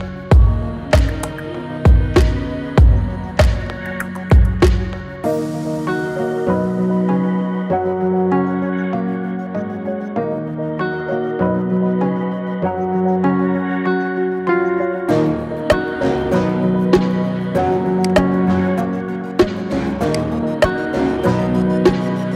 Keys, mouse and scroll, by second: 1.2-2.2 middle drag, 2.2-3.1 scroll up 1, 3.1-3.6 scroll up 3, 3.6-4.0 shift+middle drag, 4.0 scroll down 5, 4.3-5.4 middle drag, 5.4-6.4 scroll up 3, 6.4 KP_1, 9.2-11.0 shift+middle drag, 11.0 KP_1, 12.0 KP_3, 13.2-13.7 scroll down 5, 13.7-15.6 shift+middle drag, 15.6 KP_7, 16.7 shift+a, 18.4-19.0 scroll down 6, 19.0 s, 21.4 KP_1, 21.9-22.3 scroll up 8.